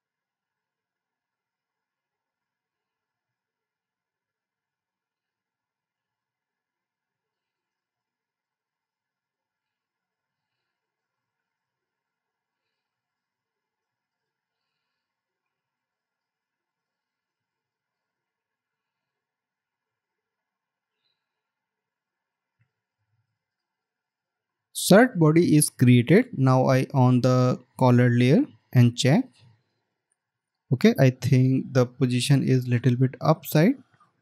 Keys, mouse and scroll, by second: 0.3 alt+click, 4.1 right click, 7.5 right click, 12.3 Down, 14.4 right click, 33.5 alt+scroll up 1.